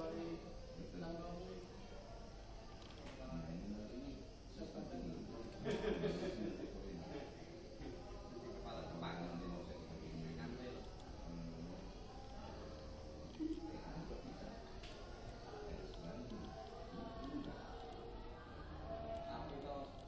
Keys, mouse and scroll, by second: 3.0-5.4 middle drag, 5.6 g, 14.1 middle click, 16.0-18.2 middle drag, 19.8 middle click.